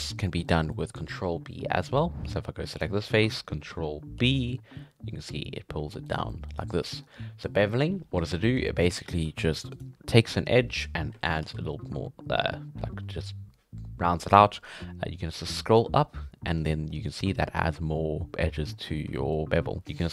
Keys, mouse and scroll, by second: 2.7 right click, 4.2 ctrl+b, 6.3 middle click, 6.8 scroll up 2, 6.9-8.0 middle drag, 8.0-8.3 scroll down 1, 8.3 shift+middle click, 8.5 scroll up 1, 8.7-9.7 middle drag, 9.7 right click, 11.4 ctrl+b, 18.5 scroll down 1, 18.7 middle click, 18.9 scroll up 2, 19.1 shift+middle click, 19.8 click.